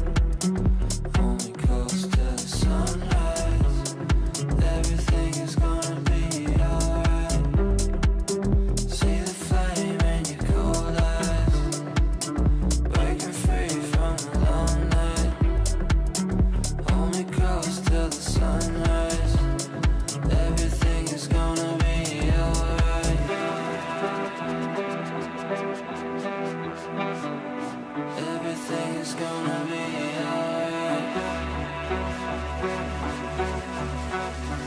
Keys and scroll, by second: 2.2 Delete, 10.4 Delete.